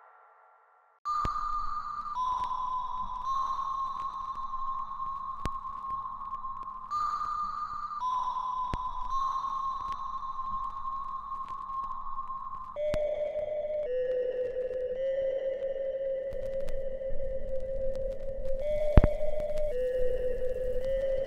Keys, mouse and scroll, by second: 4.1 space, 4.9 alt+right click, 5.5 alt+click, 6.0 alt+middle click, 6.5-8.0 alt+right drag, 8.0 click, 9.0 alt+right click, 9.5-9.9 alt+scroll down 2, 9.9 alt+middle click, 10.9 scroll up 1, 11.7-14.7 middle drag, 14.7-19.9 drag, 19.9 ctrl+z.